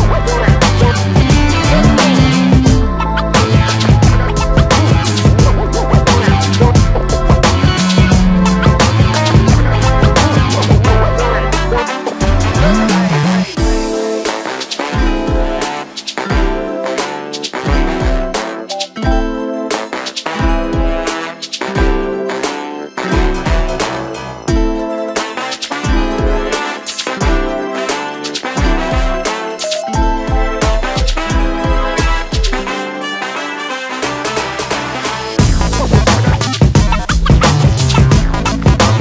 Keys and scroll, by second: 3.3 b, 4.3 space, 4.4 Escape, 5.2 space, 5.3 Escape, 17.1 space, 17.2 Escape, 32.9 ctrl+g, 34.4 ctrl+g, 36.7 ctrl+g, 37.6 ctrl+a, 38.8 ctrl+shift+g.